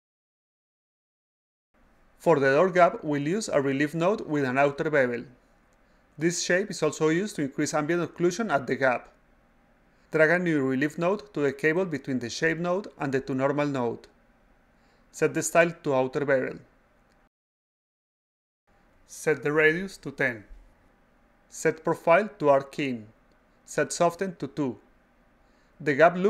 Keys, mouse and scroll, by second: 0.8 click, 0.9 click, 3.3 click, 3.5 click, 6.5 click, 8.8 click, 11.2 click, 12.0-13.2 drag, 13.5 click, 17.1 click, 18.2 click, 19.4 click, 19.6 click, 20.0-21.8 drag, 23.2 drag, 23.9 click, 24.1 click.